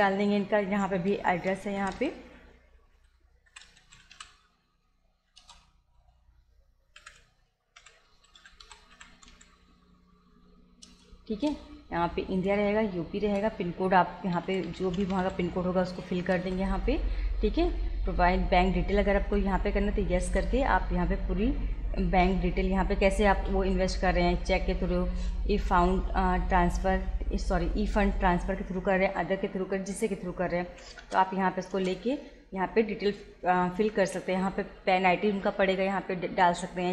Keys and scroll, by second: 1.1-4.6 typing, 5.4 Return, 7.0-9.8 typing, 10.8 Return, 14.0-15.8 typing, 16.5 Return, 19.3 y, 20.3 Return, 22.3 Down, 30.7 Up, 31.0 Return.